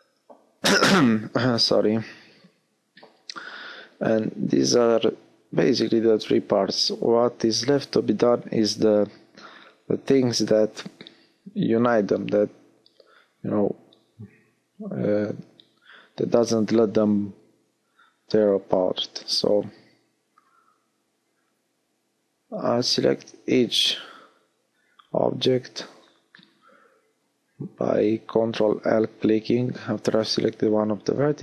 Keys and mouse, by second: 2.0 middle click, 6.0 middle click, 13.2 l, 15.1 p, 20.0 l, 21.8 p, 24.4 p, 29.1 ctrl+z, 29.5 ctrl+z, 30.7 ctrl+z.